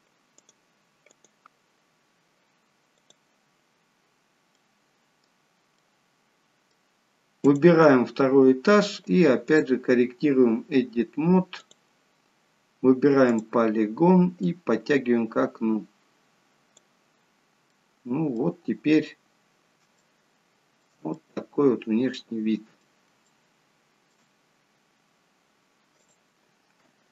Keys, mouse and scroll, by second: 0.0 scroll up 1, 0.3 click, 5.0 middle click, 5.8 middle click, 5.8-8.0 scroll up 1, 8.0 click, 8.0-8.7 scroll down 1, 9.5 click, 13.3 click, 14.4 click, 17.4 scroll down 1, 17.7 middle click, 19.2-19.9 scroll down 1, 19.9 scroll down 2, 20.0 shift+middle click, 21.2 middle click, 23.3 shift+middle click, 24.3-25.5 scroll down 1, 26.1 click, 26.1-27.1 scroll down 1.